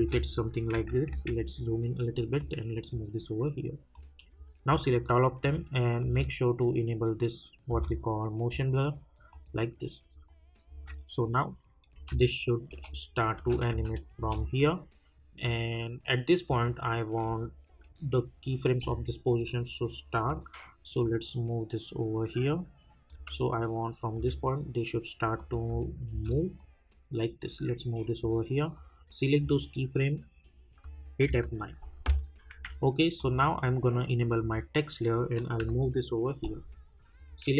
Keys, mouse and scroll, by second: 2.4-5.4 drag, 6.0 space, 9.3 click, 10.7 space, 17.5-23.1 drag, 23.1 space, 25.3 click, 25.6 space, 26.6-28.8 drag, 31.2 F9, 33.1 click, 35.6 [, 37.1-37.5 drag.